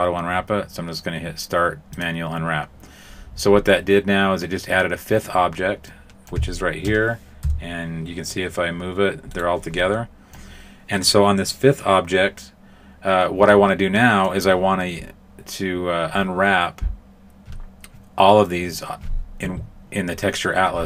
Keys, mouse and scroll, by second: 1.9 click, 5.8 middle click, 6.5 shift+middle click, 7.4 g, 9.8 middle click, 13.9 middle click.